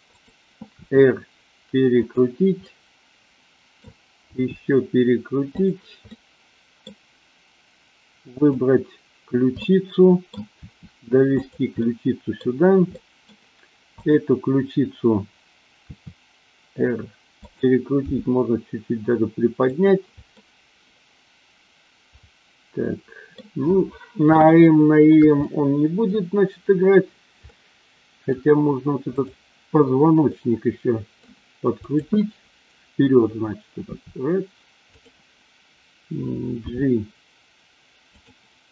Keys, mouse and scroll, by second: 0.1 click, 0.7 r, 2.0 click, 2.6-3.7 middle drag, 4.2 r, 5.5 click, 6.1-6.7 middle drag, 9.6-10.3 middle drag, 10.6 r, 11.9 middle click, 13.0 middle click, 14.1 click, 15.9 r, 17.3 click, 18.1 g, 19.7 click, 20.3-23.4 middle drag, 24.7-25.1 shift+middle drag, 25.4 scroll up 1, 25.5-26.1 middle drag, 27.5 scroll up 1, 27.7-28.4 middle drag, 29.2-29.7 drag, 30.2-31.2 middle drag, 31.7-32.5 drag, 34.0 r, 34.9 click, 36.6 g, 38.1 click.